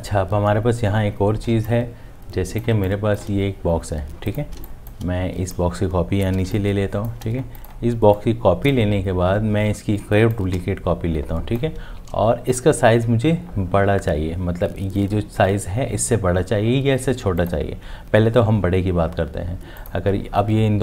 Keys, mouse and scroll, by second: 1.5 space, 2.0 click, 2.8 click, 3.8 space, 5.6 space, 5.7 alt+click, 6.4 space, 6.9 click, 6.9 space, 10.3 alt+click.